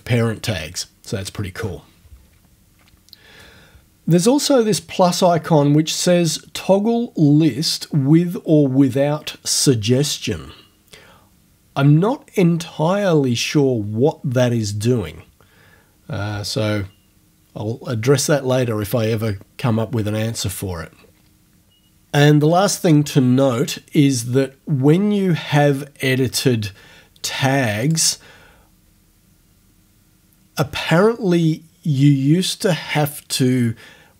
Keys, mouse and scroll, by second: 27.9 click.